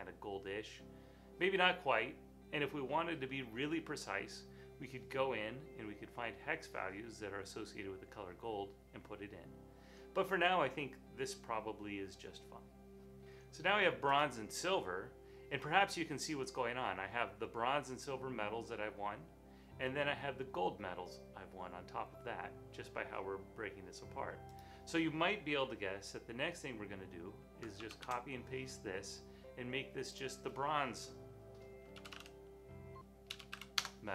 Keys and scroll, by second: 27.8 super+c, 31.9-34.0 typing.